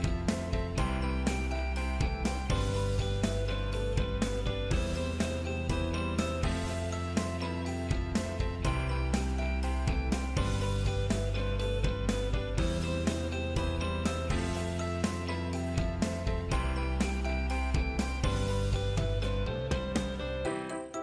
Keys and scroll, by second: 20.1 ctrl+Down.